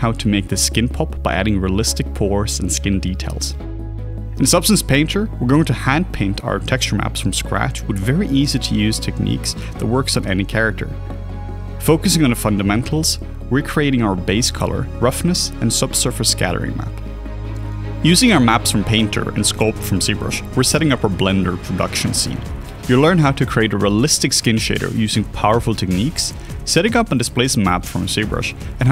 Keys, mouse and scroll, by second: 2.1 alt+a, 2.8 right click, 4.5 alt+click, 4.8 alt+click, 5.1 alt+middle click, 5.2 alt+click, 5.8 alt+click, 6.0 ctrl+right click, 6.5 alt+click, 6.6 alt+middle click, 7.3 alt+click, 7.4 alt+double click, 7.5 alt+click, 8.2 ctrl+right click, 9.0 alt+middle click, 9.1 alt+click, 10.0 alt+click, 10.7 ctrl+click, 11.5 alt+middle click, 11.6 alt+click, 12.4 x, 13.1 ctrl+right click, 13.2 ctrl+z, 14.8 alt+middle click, 14.9 alt+right click, 15.2 alt+click, 15.3 alt+middle click, 15.4 alt+click, 15.7 alt+middle click, 17.8 alt+click, 17.9 alt+middle click, 18.1 alt+click, 18.8 alt+click, 19.7 alt+click, 28.3 q, 28.6 right click, 28.8 q.